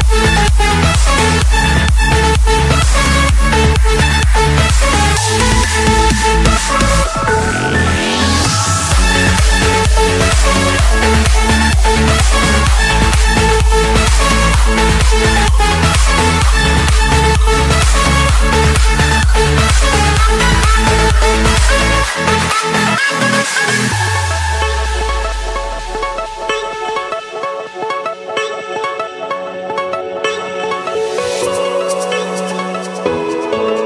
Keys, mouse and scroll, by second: 0.2 click, 0.6-1.6 scroll, 1.9 click, 2.2 scroll, 2.4 Escape, 2.9 click, 5.6 right click, 7.2-8.2 drag, 8.4-9.4 drag, 10.6-11.2 typing, 11.8 Return, 12.8 click, 13.1 Return, 14.3-15.4 drag, 15.5 click, 16.7-17.7 shift+drag, 17.8 Return, 20.1-21.2 drag, 24.4 click, 24.9-25.6 scroll, 26.3 click, 26.9 click, 27.5 click, 28.9 click, 29.5-30.7 scroll.